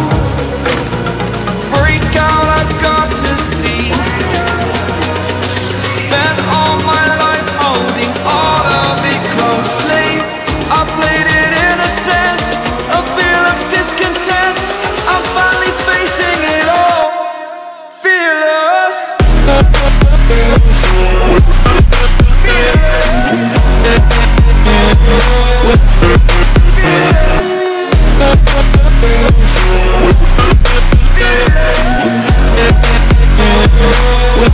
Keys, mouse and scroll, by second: 4.0 alt+scroll up 1, 4.6-6.7 ctrl+alt+scroll down 3, 6.7 click, 12.6 click, 16.2 alt+scroll up 1, 16.7-18.9 typing, 16.8 click, 17.6 ctrl+alt+scroll down 1, 18.7 click, 21.7 ctrl+alt+click, 22.6-24.7 typing, 23.6 click, 24.3 click, 24.8 click, 26.3 typing, 26.6 click, 28.3-28.9 typing, 28.4 click, 29.1 click, 30.0-34.1 typing, 30.9 click, 31.7 click, 32.0 click, 32.3 click, 32.7 click, 33.0 click, 34.2 click.